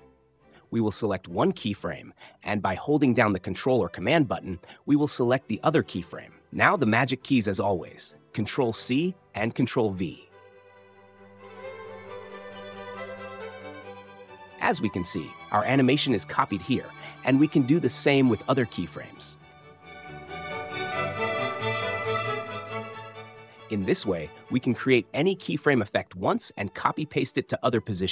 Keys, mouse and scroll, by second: 2.4 click, 5.7 ctrl+click, 10.7 ctrl+c, 13.0 click, 14.6 ctrl+v, 17.7 click, 18.4 space, 20.4 space, 22.0 click, 25.1 click, 26.4 click.